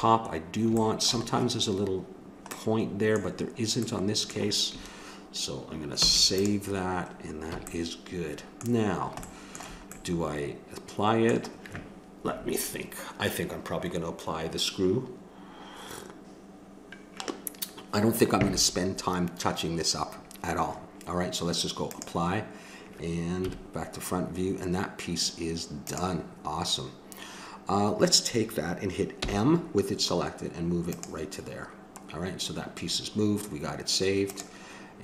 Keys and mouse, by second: 6.0 ctrl+s, 7.5 a, 21.8-23.4 drag, 23.4 KP_1, 25.8-27.6 drag, 29.2 m, 34.3-35.0 drag.